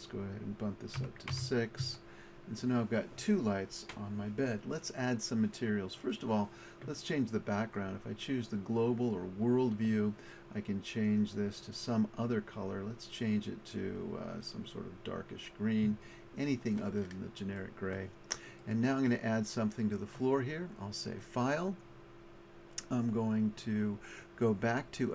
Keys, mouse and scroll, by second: 6.1-9.9 drag, 11.1 click, 17.1 middle click, 20.6 middle click, 23.0-24.9 middle drag.